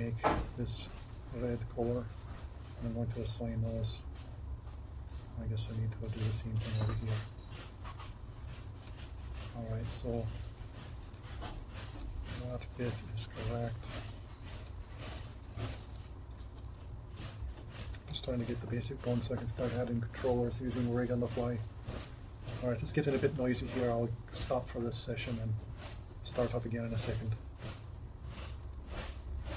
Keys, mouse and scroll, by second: 7.9 click, 25.2 ctrl+Tab, 26.0 ctrl+Tab, 26.7 ctrl+Tab.